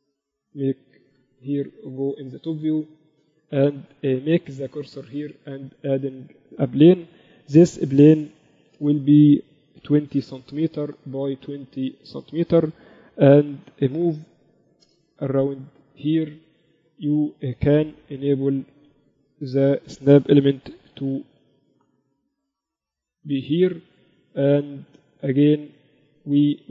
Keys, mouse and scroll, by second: 1.2 KP_1, 2.2 z, 4.1-6.1 drag, 4.5 shift+a, 8.3 s, 9.7 s, 13.0 r, 15.9-17.7 drag, 16.9 z, 17.9 shift+Tab, 19.1 ctrl+Up, 20.8 g, 24.9 Tab, 26.1-26.7 drag.